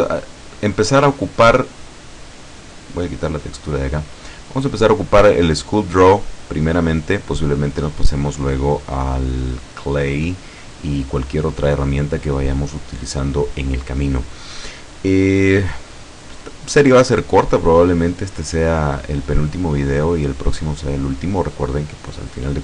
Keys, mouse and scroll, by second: 0.3-1.5 scroll up 3, 1.7-2.3 scroll up 2, 3.3 click, 4.1 scroll up 1, 8.0 click, 10.9 click.